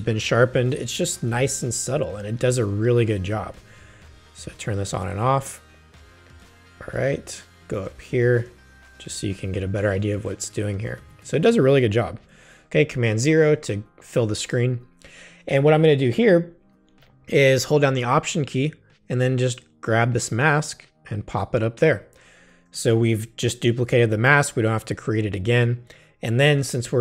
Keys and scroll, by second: 1.1 super+=, 2.1 super+space, 6.3 space, 12.1 super+0.